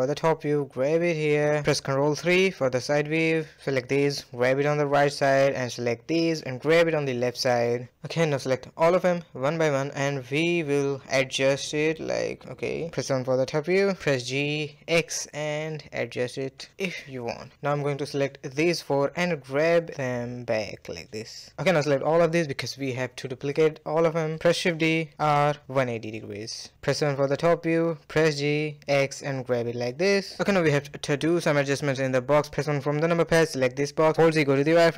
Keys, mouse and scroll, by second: 0.7-1.1 middle drag, 1.1 ctrl+KP_3, 2.2 drag, 4.2 g, 6.3 click, 7.3 g, 8.8 shift+click, 9.6 shift+click, 10.4 shift+click, 11.4 shift+click, 11.9-12.3 middle drag, 12.3 KP_7, 12.7 g, 14.1-15.4 middle drag, 15.5 middle click, 15.9 g, 16.4 middle click, 17.0 click, 17.4 shift+drag, 17.8 shift+click, 18.3 ctrl+z, 18.5 shift+drag, 18.7 shift+drag, 19.3 g, 20.9 shift+click, 22.0 middle click, 22.9 shift+click, 23.4 shift+click, 23.8-24.2 middle drag, 24.2 shift+d, 26.9 KP_7, 27.3-27.6 scroll up 1, 27.6 g, 29.2-30.7 middle drag, 30.7 a, 30.8 a, 31.1-32.0 scroll down 2, 32.0-32.8 middle drag, 32.8 KP_1, 33.5 click, 34.1 z, 34.6 click.